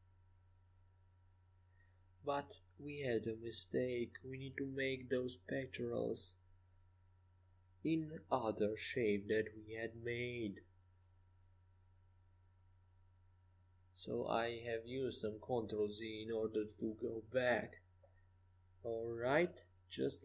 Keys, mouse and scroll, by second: 2.1 ctrl+z, 2.3 ctrl+z, 2.5 ctrl+z, 3.4 ctrl+z, 4.4 KP_5, 4.8 KP_5, 5.8 KP_1, 6.9 KP_1, 7.2 KP_5, 8.4 KP_5, 8.5 KP_1, 9.2 KP_3, 10.9-12.1 middle drag, 12.7-16.6 middle drag, 16.6 ctrl+shift+z, 17.3 ctrl+shift+z, 18.9 ctrl+z, 19.6 ctrl+shift+z, 20.1 ctrl+shift+z.